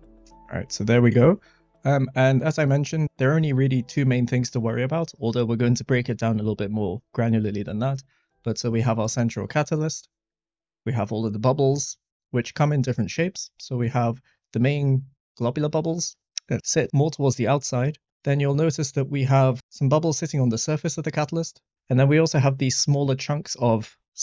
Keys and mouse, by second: 13.2 middle click, 16.2 middle click, 16.8 middle click, 17.7 middle click.